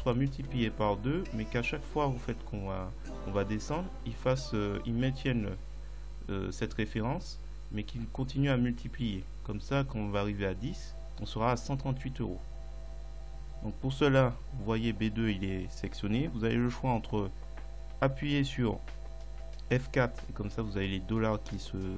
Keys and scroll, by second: 18.7 F4.